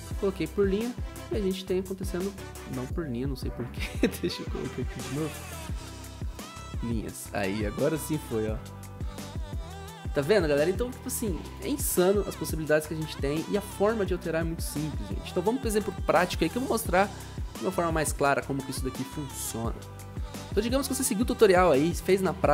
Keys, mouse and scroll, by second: 20.1 click.